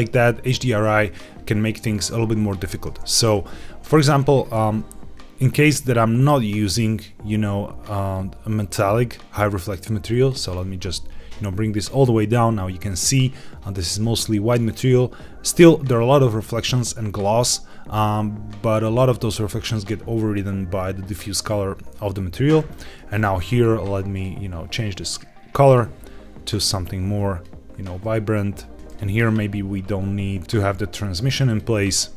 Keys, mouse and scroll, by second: 3.8 click, 9.6 click, 14.7 scroll up 1, 17.3-17.7 scroll down 2, 22.6 click, 24.0 click, 28.8 click, 30.4-31.1 scroll down 1, 31.1 click.